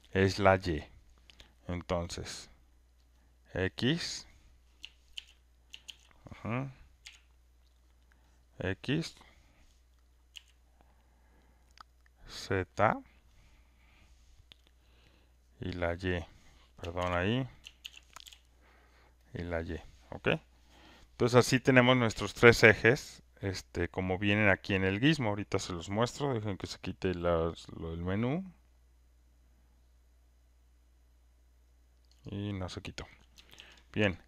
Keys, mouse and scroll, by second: 3.8 F1, 5.1 ctrl+z, 5.8 ctrl+z, 7.0 F1, 7.0 r, 8.4 click, 10.3 b, 13.1 click, 15.7 click, 16.1 click, 17.0 ctrl+z, 17.8 ctrl+z, 18.2 F1, 18.2 g, 19.1 click, 19.4 click, 32.2 click.